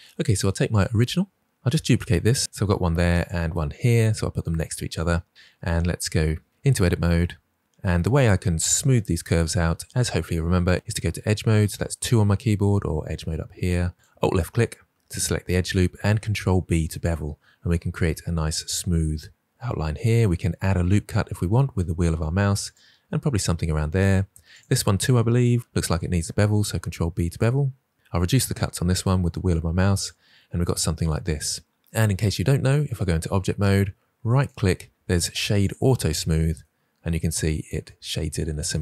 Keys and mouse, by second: 1.7 shift+d, 2.1 x, 5.1-5.6 shift+middle drag, 6.5 Tab, 7.4 middle click, 10.7 ctrl+z, 11.6 2, 15.9 ctrl+b, 22.5 click, 24.5 alt+click, 26.4 ctrl+b, 32.8 Tab, 34.3-35.7 right drag.